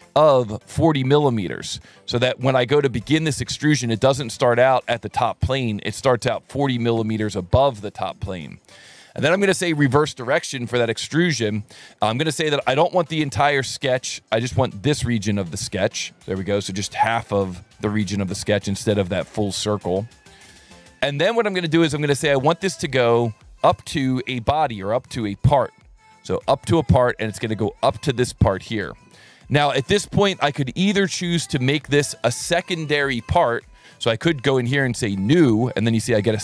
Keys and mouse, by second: 0.3 click, 0.8 click, 1.3 click, 2.2 alt+1, 3.6 click, 4.6 click, 5.9 click, 6.7 KP_4, 7.0 KP_Enter, 9.3 click, 13.5 click, 15.4 click, 19.1 click, 20.2 click, 23.5 click, 26.3 click, 27.4 click, 35.2 click.